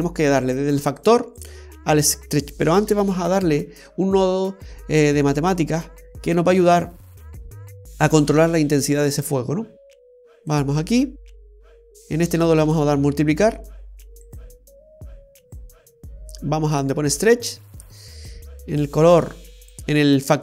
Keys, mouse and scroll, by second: 1.1 click, 3.1 shift+a, 12.8 click, 18.4 click.